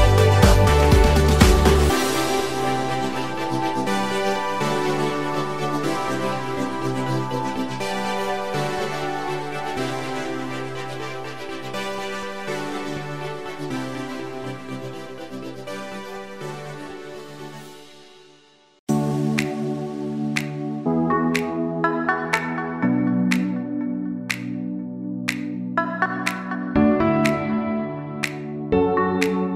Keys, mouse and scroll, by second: 0.0 click, 0.2-0.6 scroll down 1, 0.6-3.2 middle drag, 3.3-3.7 shift+middle drag, 4.1-5.0 middle drag, 10.5 KP_3, 11.7-12.6 shift+middle drag, 13.8 shift+a, 17.4-19.3 drag, 19.5-20.8 drag, 21.1-24.5 drag, 25.4-26.2 drag, 26.7-27.1 scroll up 3, 27.3-28.2 shift+middle drag.